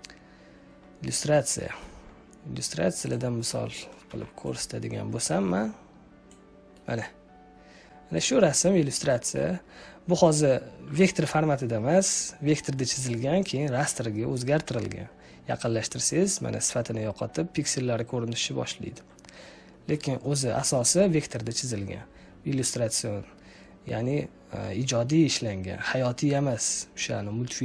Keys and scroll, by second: 4.0 u.